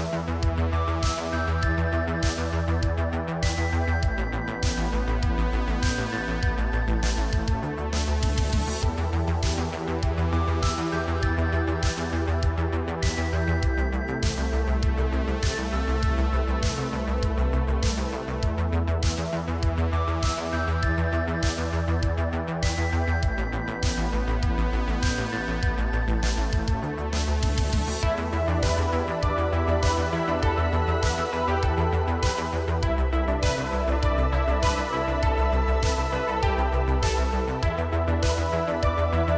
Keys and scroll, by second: 1.6 g, 2.9 Tab, 9.0 Tab, 9.5 g, 11.1 g, 12.5 g, 20.7 Tab, 21.4 Tab, 21.9 2, 23.0 shift+s, 23.6 Tab, 27.7 Tab, 29.4 shift+s, 30.4 Tab, 32.1 Tab, 32.7 3, 33.6 shift+s, 34.6 Tab, 36.0 Tab, 36.7 shift+s.